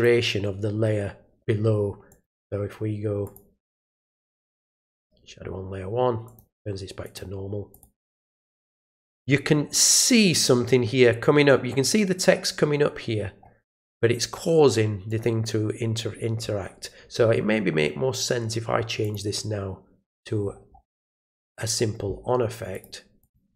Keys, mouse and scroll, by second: 2.1 click, 3.2 click, 4.9 click, 6.2 click, 7.0 click, 7.7 click, 15.1 click, 19.0 click, 20.4 scroll up 1, 21.4 click, 22.7 click, 23.2 click.